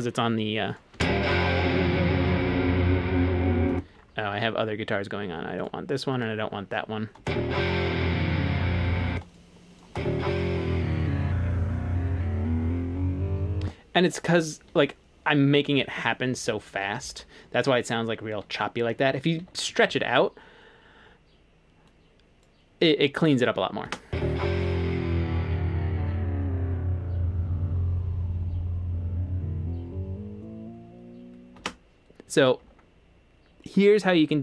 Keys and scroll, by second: 1.0 space, 3.7 space, 7.2 space, 9.1 space, 13.6-14.7 typing, 19.4-19.9 typing, 23.9 space, 31.6 space.